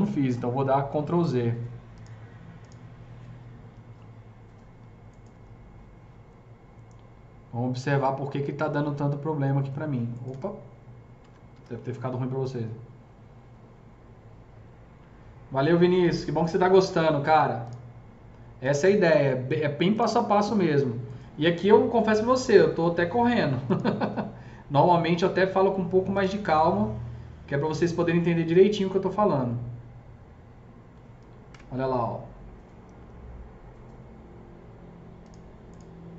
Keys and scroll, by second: 5.3 F3, 10.2 F3, 11.4 F4, 21.2 F3, 31.4 KP_0.